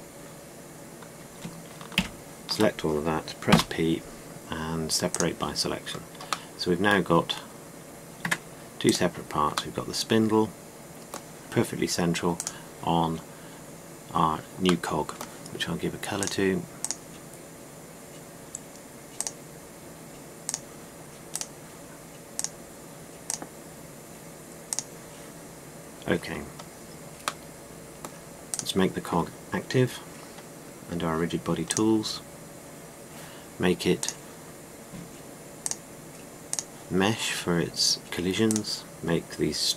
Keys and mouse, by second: 0.0 f, 2.7 ctrl+l, 4.2 p, 6.5 middle click, 8.9 Tab, 10.7 middle click, 10.8 middle click, 11.0 middle click, 11.2 middle click, 11.4 middle click, 14.5 middle click, 15.7-16.9 middle drag, 16.9-20.1 drag, 27.2-28.3 middle drag, 29.2-30.3 right drag, 32.4-33.9 drag, 37.7 middle click.